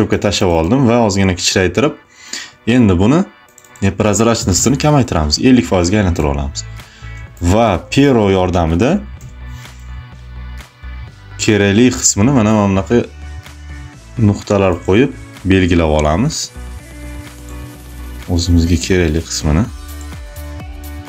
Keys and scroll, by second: 4.2 5, 7.1 space, 9.0 p, 18.6 ctrl+alt+z.